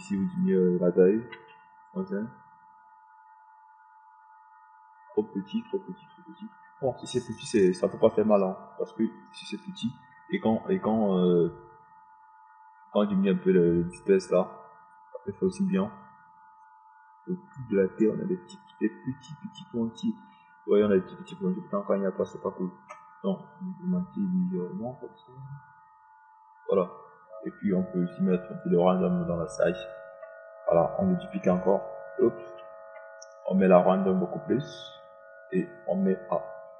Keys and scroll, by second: 2.8 KP_Decimal, 3.4 KP_5, 33.9 ctrl+d.